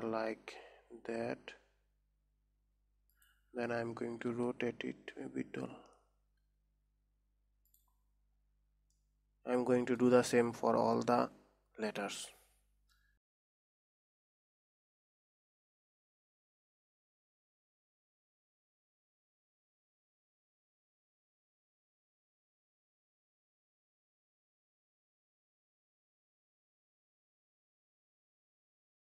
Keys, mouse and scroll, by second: 4.7 r, 8.5-9.0 scroll down 4, 9.5-12.6 middle drag, 12.8 middle click, 13.5 click, 14.0 alt+g, 14.7 KP_1, 15.2 g, 16.8-20.1 typing, 18.1-18.4 scroll up 2, 22.5 r, 22.9 g, 24.0 s, 25.9 shift+click, 26.2 click, 26.6 middle click, 26.8 scroll down 3, 27.0 middle click, 27.3 click, 28.0 s.